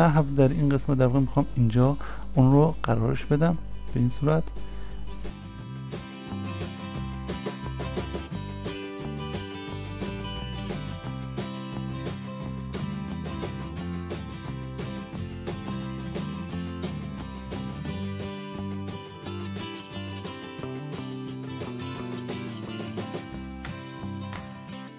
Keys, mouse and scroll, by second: 7.7-8.8 scroll up 1, 8.8 scroll down 1, 10.3 scroll up 1, 11.6 scroll down 1, 12.5-13.2 scroll up 1, 14.8 scroll, 14.8 s, 18.0 s, 21.7 s, 23.5 s.